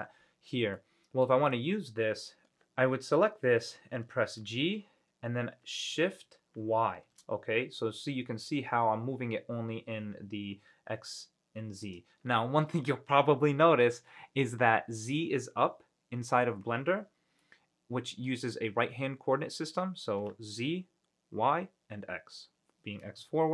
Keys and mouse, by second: 0.9 middle click, 4.6 g, 7.2 shift+y, 12.0-17.6 drag, 17.6-18.4 middle drag.